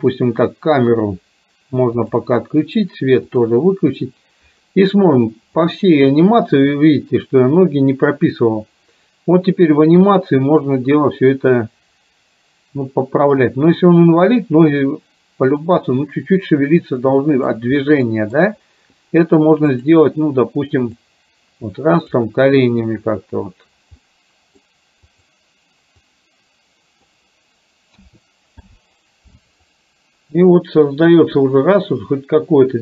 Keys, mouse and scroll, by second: 2.0 click, 5.7 click, 6.3-17.8 drag, 17.9 middle click, 19.7 click, 21.3 click, 24.0 middle click, 25.2 click, 26.2-27.3 drag, 28.0 a, 28.7 i, 29.8-32.8 drag.